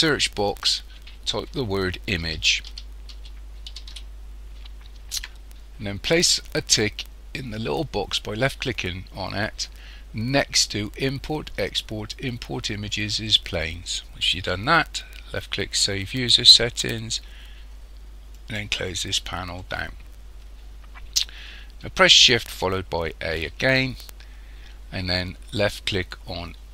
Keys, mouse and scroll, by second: 23.2 shift+a.